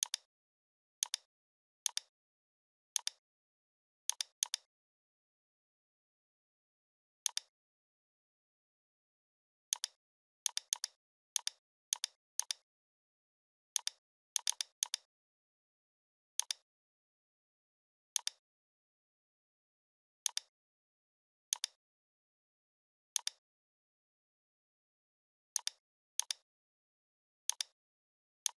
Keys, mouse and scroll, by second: 1.6 scroll down 1, 1.8 space, 1.9 click, 3.1-3.6 shift+click, 3.8 scroll up 1, 4.1-5.5 space, 5.5 scroll up 1, 7.3-8.9 alt+shift+drag, 10.7 space, 10.7 click, 15.4 right click, 16.4 click, 17.0 right click, 18.1 click, 18.2 click, 18.7 right click, 20.3 click, 22.1 right click, 23.1 click, 24.6 right click, 25.6 click, 26.9 right click, 27.5 click.